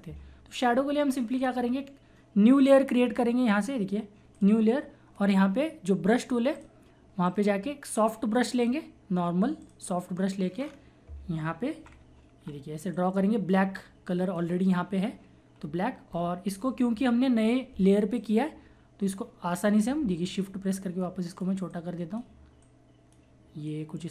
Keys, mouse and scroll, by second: 1.4 click, 3.8 typing, 4.3 click, 5.9 right click, 6.6 click, 7.2 right click, 8.5 click, 9.6 click, 10.6-11.4 scroll down 1, 11.8-12.4 typing, 12.9-18.1 drag, 18.2 click, 20.2-22.6 shift+drag, 22.6 shift+click, 23.7-24.1 shift+drag.